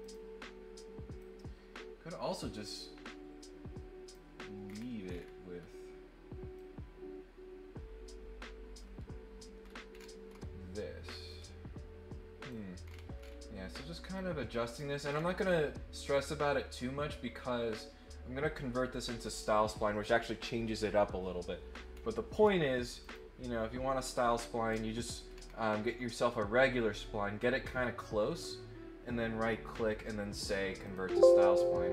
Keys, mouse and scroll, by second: 0.0 click, 1.2-4.1 drag, 4.6 scroll down 2, 5.0-5.6 scroll up 2, 6.5-8.7 drag, 9.6 scroll up 1, 9.9 scroll down 1, 10.3 scroll up 1, 11.2-12.5 drag, 12.8 scroll down 1, 13.2 scroll up 1, 14.1 click, 15.0 scroll down 1, 15.4 scroll up 1, 16.4-19.6 drag, 21.9-22.4 scroll down 2, 23.0 click, 24.6 scroll down 1, 25.1 scroll up 2, 25.4 scroll down 1, 27.7 right click, 30.8 click.